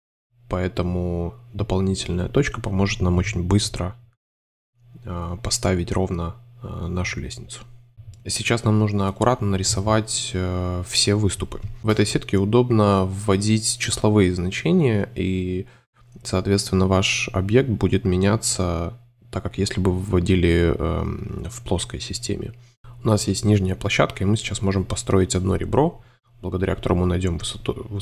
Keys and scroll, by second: 0.0-1.3 typing, 2.3 2, 3.0 m, 4.8 shift+v, 6.4 shift+Tab, 8.7 shift+Tab, 13.4 Right, 13.7-14.5 typing, 16.9 5, 19.7 super+c, 19.8 super+f, 20.2 5, 22.5 Delete, 24.4 super+z, 25.0 |.